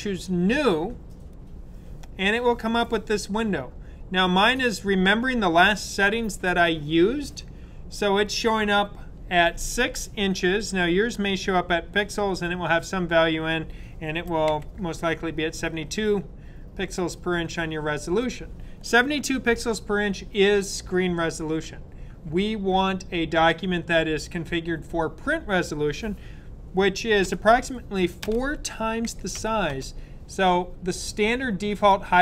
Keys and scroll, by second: 14.1-14.4 typing, 28.8-30.1 typing.